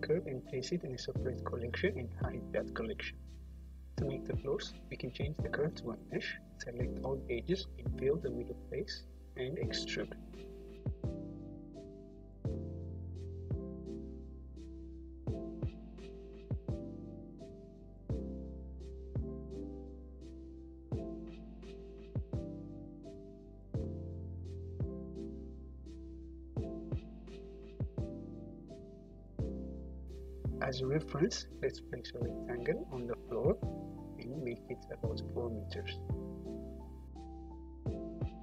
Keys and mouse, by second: 1.5 middle click, 3.4-11.7 right drag, 7.7 Tab, 8.1 a, 9.4 f, 10.9 Tab, 11.7-13.2 middle drag, 16.4 Tab, 17.3 3, 17.7 middle click, 18.9 e, 19.4 click, 20.5-22.0 drag, 22.0-25.4 middle drag, 24.8 Tab, 25.4-27.2 drag, 27.2 middle click, 27.3-30.3 drag, 30.9 shift+a, 33.5-35.9 drag, 36.3-36.7 drag, 37.3 click.